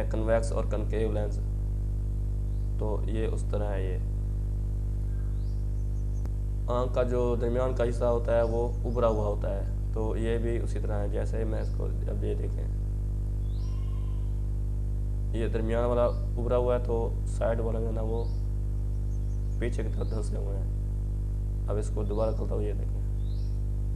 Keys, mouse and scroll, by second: 8.1-10.5 drag, 8.3-9.0 typing, 10.5-14.4 drag, 12.8-13.5 typing, 14.9 click, 15.7-16.4 typing, 17.1-23.9 drag, 19.0-19.7 typing.